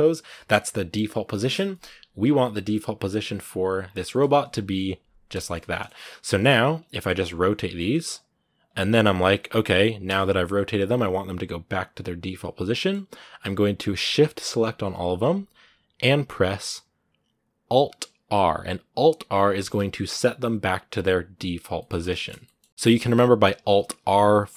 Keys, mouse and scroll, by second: 1.9 a, 2.0-2.5 scroll down 2, 2.5-3.6 middle drag, 3.6-3.9 scroll up 2, 3.9-5.4 middle drag, 5.4-6.0 scroll up 3, 5.4 middle click, 6.0 shift+middle click, 6.6 right click, 6.7 middle click, 6.8 scroll up 1, 7.0 right click, 7.9 right click, 9.8 right click, 10.1 r, 12.5-13.6 middle drag, 13.6-19.4 right drag, 19.4 alt+r, 21.6-24.5 middle drag.